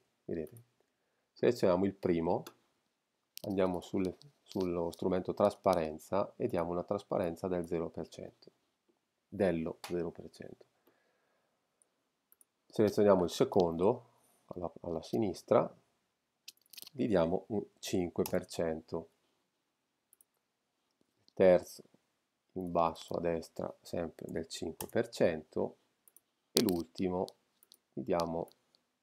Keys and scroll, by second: 17.8 5, 18.2 Return, 24.3 5, 24.8 Return.